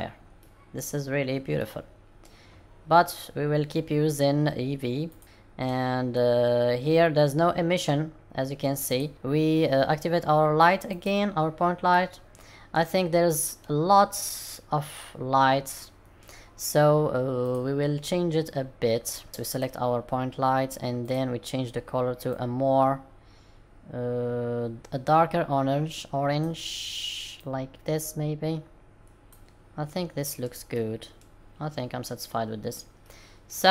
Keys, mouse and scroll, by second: 31.3 middle click, 31.3-31.7 scroll down 7, 33.0 middle click.